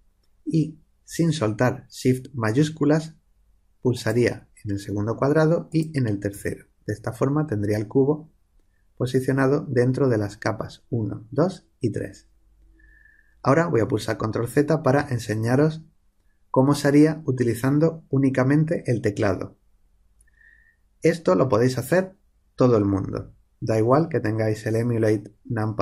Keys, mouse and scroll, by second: 14.9 ctrl+z.